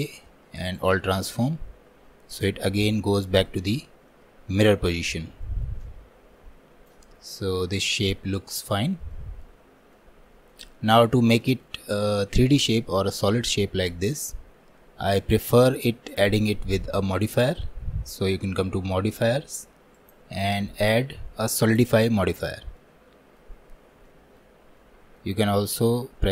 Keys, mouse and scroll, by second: 2.4-4.1 drag, 4.2-5.2 middle drag, 5.2 scroll down 1, 5.5-13.3 shift+middle drag, 13.3-14.0 scroll up 1, 14.0-14.7 scroll up 1, 14.7-15.5 scroll up 1, 15.5 shift+middle click, 16.1-19.1 drag, 21.8-22.8 drag, 22.8 middle click, 23.7-24.1 scroll up 3, 24.1-26.3 shift+middle drag.